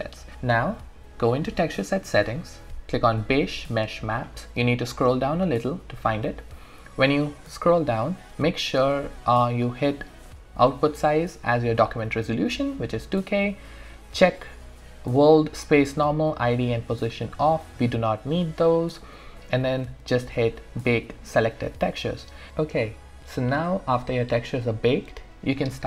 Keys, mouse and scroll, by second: 1.7 click, 4.2-4.8 scroll up 1, 4.9-6.0 scroll down 1, 6.0 click, 10.9 click, 20.8 click.